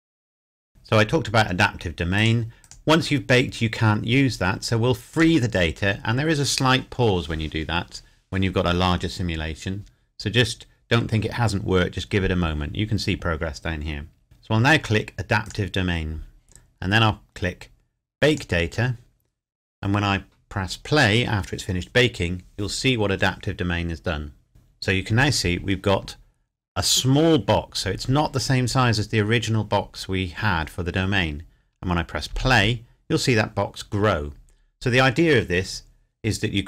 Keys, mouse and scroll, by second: 2.2 click, 5.1 click, 15.4 click, 18.3 click, 32.3 space.